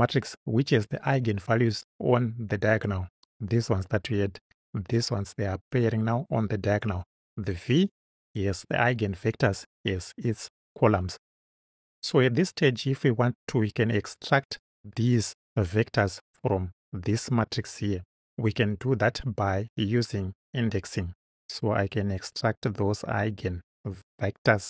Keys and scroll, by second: 23.3 Return.